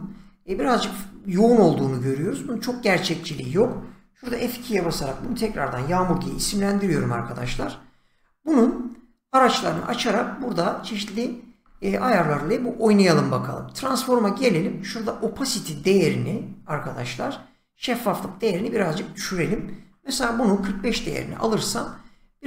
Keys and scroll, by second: 4.2 F2, 4.7 Caps_Lock, 4.8-6.7 typing, 6.8 Return, 19.9-21.0 typing.